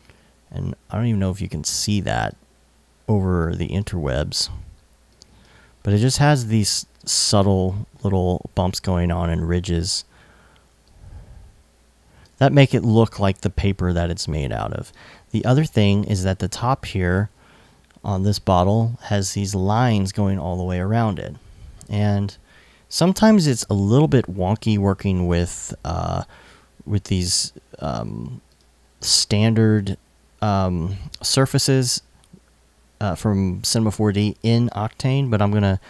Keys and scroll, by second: 21.4 super+s.